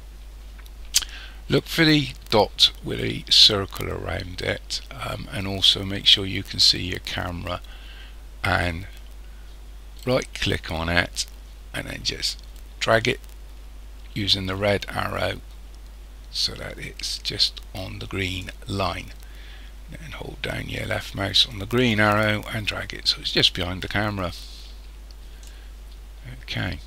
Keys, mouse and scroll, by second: 1.8-2.6 scroll up 3, 2.6-3.2 scroll down 1, 10.0 right click, 12.6 click, 21.5 click.